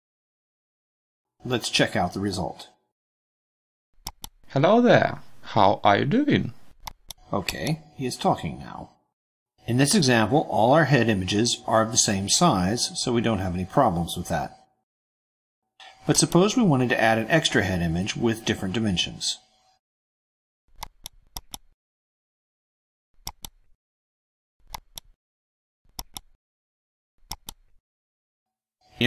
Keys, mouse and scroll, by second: 0.0 click, 0.4 BackSpace, 0.6 Return, 2.1-3.5 drag, 4.1 click, 6.7 click, 7.5 click, 15.9 click, 20.9 click, 21.4 click, 23.3 click, 24.7 click, 25.9 click, 27.3 click.